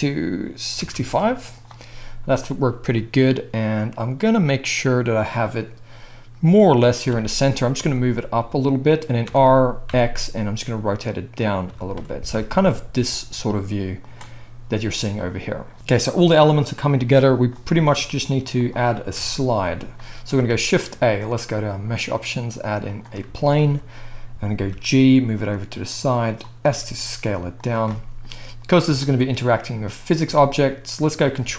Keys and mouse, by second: 7.1 g, 9.0-13.7 middle drag, 9.2 r, 11.6 g, 18.6 click, 19.1 KP_1, 20.5 shift+a, 23.5-31.5 shift+middle drag, 24.6 g, 26.6 s, 31.4 ctrl+a.